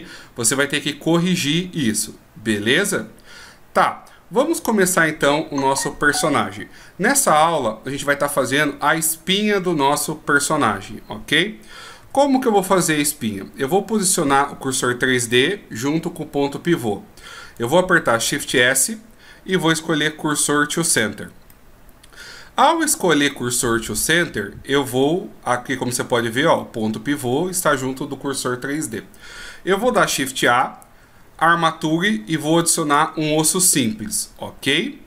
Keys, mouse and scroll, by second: 12.2 n, 18.6 shift+s, 21.7 middle click, 30.6 shift+a, 34.0 middle click.